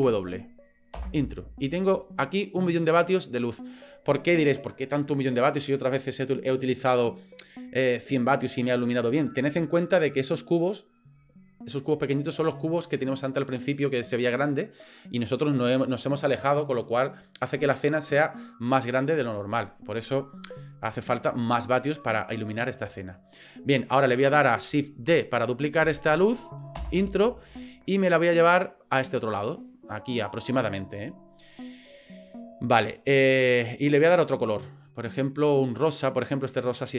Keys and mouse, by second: 2.0-3.6 middle drag, 23.3-23.9 middle drag, 24.3 middle click, 25.9 shift+d, 28.2-29.2 drag, 29.7-30.5 drag.